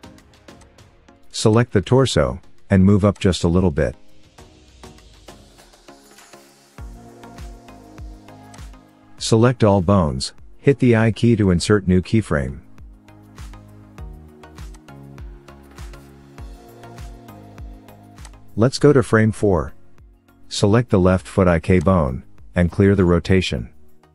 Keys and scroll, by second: 9.8 a, 12.3 i, 23.9 alt+r.